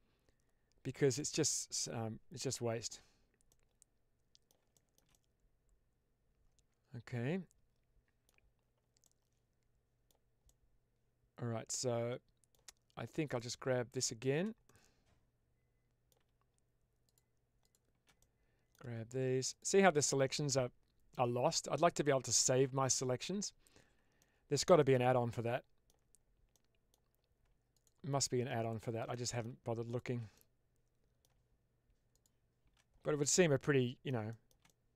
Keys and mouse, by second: 1.1-2.8 middle drag, 3.4-4.6 middle drag, 4.6 shift+middle drag, 5.0-8.1 middle drag, 8.9-10.0 middle drag, 10.3-12.5 middle drag, 13.1 click, 13.9 shift+click, 14.6-16.0 middle drag, 16.9 shift+click, 17.5 shift+click, 18.1-18.6 middle drag, 24.1-24.5 shift+middle drag, 24.7-25.8 middle drag, 26.4-26.8 middle drag, 27.7 shift+click, 29.0 middle click, 30.2 middle click, 32.1 shift+click, 33.2-34.0 middle drag, 34.2 shift+middle drag, 34.5-34.9 middle drag.